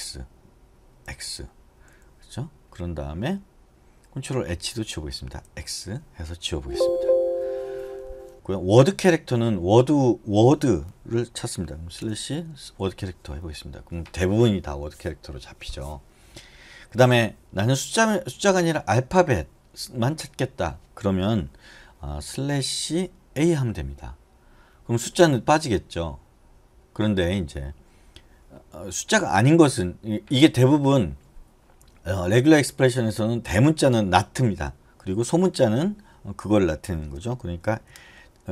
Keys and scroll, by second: 0.0-1.7 typing, 4.1-6.1 typing, 7.0 Escape, 12.0-13.6 typing, 23.1 BackSpace, 23.6 a, 37.2 BackSpace.